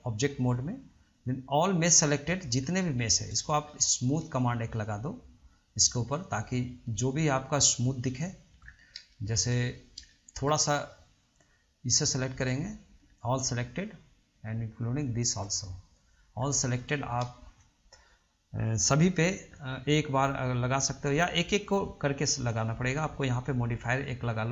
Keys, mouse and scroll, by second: 1.3 click, 2.2-3.0 scroll up 2, 3.0-3.6 shift+middle drag, 3.6-3.9 scroll up 1, 3.9-4.9 middle drag, 4.9 shift+click, 5.9 shift+click, 7.2 shift+click, 8.3 shift+click, 8.8 scroll down 1, 8.9 scroll up 1, 9.3-12.1 shift+middle drag, 12.1 shift+click, 12.7-13.9 middle drag, 13.9-15.0 scroll down 1, 15.0 shift+click, 15.8-16.6 middle drag, 16.6 scroll down 1, 16.9-20.6 shift+middle drag, 21.2 drag, 21.8-23.5 drag.